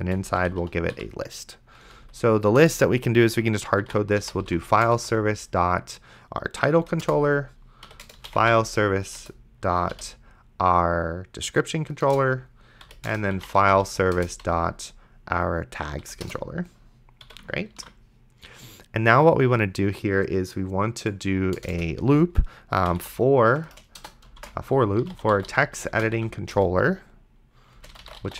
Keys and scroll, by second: 0.0-0.9 typing, 1.8 Left, 2.6 Return, 3.6-5.1 typing, 6.6 Down, 7.0 Return, 7.6-9.9 typing, 9.2 Return, 12.1 Return, 12.8-14.4 typing, 13.1 Return, 16.0 Down, 16.2 Return, 17.2 ,, 18.0 ctrl+s, 21.6 Return, 22.5-26.2 typing, 26.5 Return, 27.6-28.3 typing.